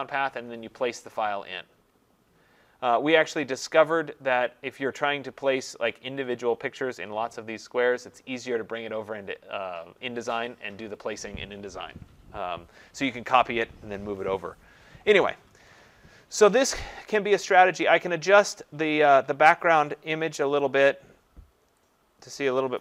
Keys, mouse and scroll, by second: 18.0 click, 20.4 shift+click.